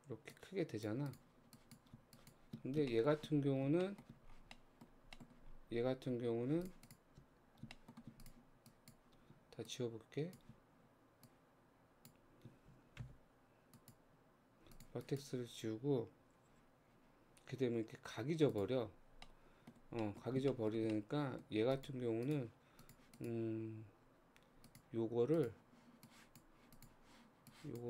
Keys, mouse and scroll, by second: 0.4 click, 1.1 click, 2.2 shift+click, 2.7 scroll down 2, 2.9 shift+middle click, 3.2-3.9 shift+scroll up 2, 3.9 shift+middle click, 4.1-4.6 scroll down 4, 4.6 middle click, 4.9 scroll down 1, 5.2 middle click, 5.3-6.7 scroll up 10, 6.2 Tab, 6.9 click, 7.2 Tab, 7.5 scroll up 1, 7.7 shift+middle click, 8.2 click, 8.7 click, 9.7 click, 11.3 shift+click, 13.0 x, 14.8 click, 15.6 scroll down 2, 16.5 g, 18.9-19.3 scroll down 3, 19.3 middle click, 19.8-20.1 scroll down 1, 20.1-21.5 middle drag, 21.5 scroll up 1, 21.8 click, 22.3 click, 22.7 Tab, 22.8 click, 23.2 click, 24.1 Tab, 24.7 click, 25.4 click, 26.1 click, 26.8 click, 27.5 click.